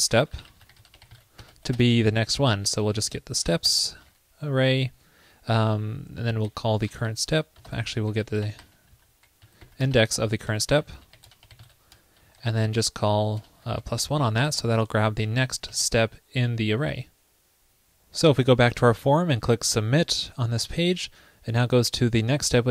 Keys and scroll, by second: 7.7 alt+BackSpace, 9.1 alt+BackSpace, 14.6 super+Tab, 16.9 super+s.